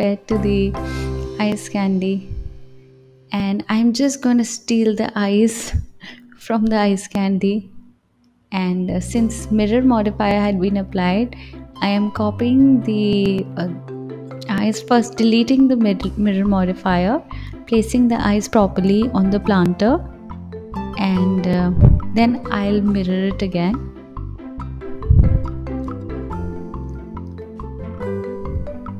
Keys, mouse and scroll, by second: 1.4 shift+click, 2.2 click, 2.8 click, 3.9 shift+click, 5.5 click, 6.0 click, 7.8 shift+d, 9.2 ctrl+z, 11.0 shift+d, 14.6 click, 15.5-16.7 scroll up 4, 16.7-17.7 drag, 17.7 s, 19.6 KP_7, 20.9 g, 22.5 click, 24.0 KP_1, 25.9 r, 28.1 KP_3.